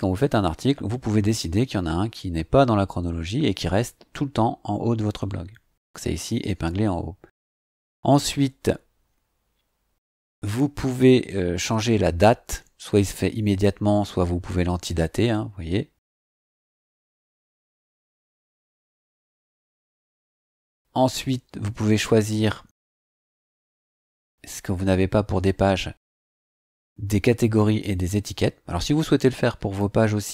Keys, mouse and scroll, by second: 0.2 click, 8.6-10.9 scroll down 2, 10.9-11.2 scroll up 2, 11.8 scroll up 2, 12.9 click, 18.8 click, 19.9-20.3 scroll down 2, 25.9 scroll down 2.